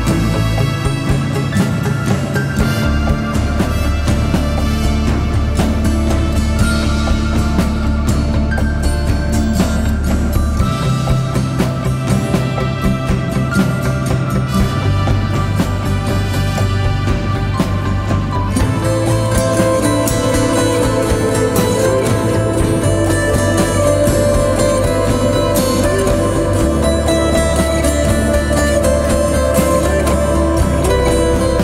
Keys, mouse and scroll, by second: 3.3 Return, 8.2 ctrl+click, 17.4 ctrl+t, 19.1 alt+shift+click, 24.1 Return.